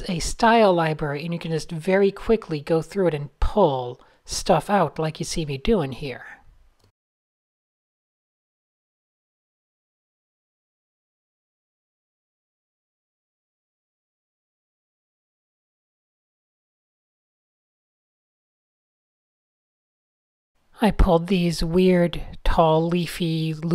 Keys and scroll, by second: 3.1 p, 5.2 a, 6.3 shift+super+a, 6.6 o, 6.9 p, 8.6 a, 10.1 shift+super+a, 10.4 p, 11.5 super+z, 13.3 shift+super+a, 14.2 p, 16.1 shift+super+a, 16.4-17.2 typing, 20.2 n, 20.8 super+z, 21.1 super+d, 22.0 super+z.